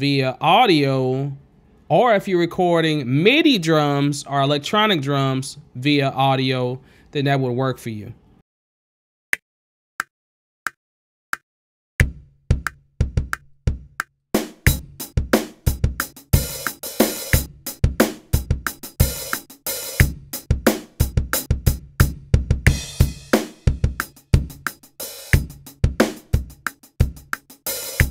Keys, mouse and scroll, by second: 1.9 space, 2.1 click, 3.9 alt+s, 4.0 click, 8.2 click, 9.3 space, 14.2 click.